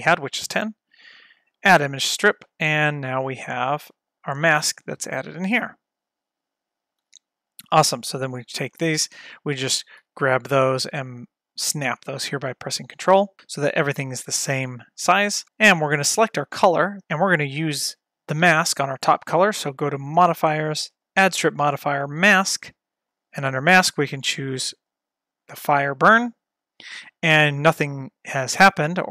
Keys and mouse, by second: 1.5 click, 3.1 space, 7.1 space, 8.1 click, 10.1 g, 11.7 click, 13.4 space, 16.1 click, 20.1 click, 21.1-22.4 drag, 23.1-25.9 drag, 27.7-29.1 drag.